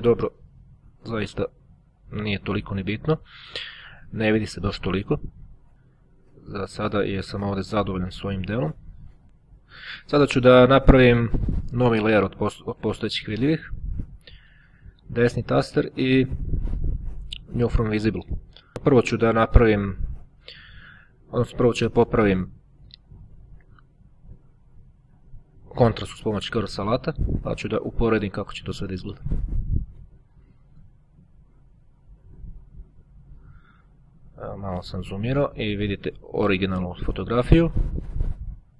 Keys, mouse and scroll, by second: 0.3-0.9 ctrl+scroll down 2, 0.9-2.0 ctrl+scroll down 1, 2.0-3.2 ctrl+scroll down 1, 3.2 ctrl+scroll down 1, 3.4-3.9 ctrl+scroll up 1, 7.2-8.5 drag, 17.3 click, 18.7-19.9 drag, 20.9-23.2 drag, 24.4-26.2 drag, 26.4-28.7 drag, 29.5-30.7 drag, 31.4 click, 35.1-36.3 ctrl+scroll up 1, 37.3-38.3 drag, 38.5-38.7 scroll up 1.